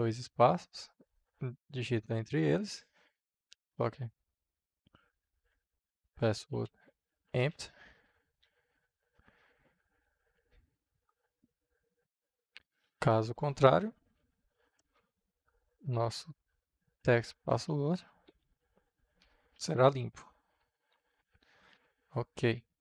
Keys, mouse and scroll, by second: 1.1 Left, 3.0-8.7 typing, 9.6 Right, 11.2 Return, 12.0 Return, 12.6-13.5 typing, 14.7 Return, 15.6-18.3 typing, 17.1 Down, 17.4 Return, 19.5 shift+`, 20.3 Right.